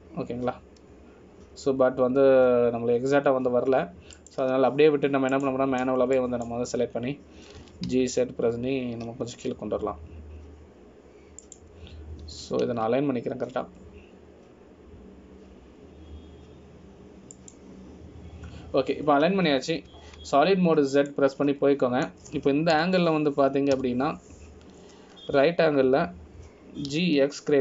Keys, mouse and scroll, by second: 7.5 click, 8.3 click, 9.8 g, 14.5 g, 21.1 scroll down 2, 22.1 scroll down 3, 22.1 z, 23.3 middle click, 24.9 KP_1, 25.9 KP_3.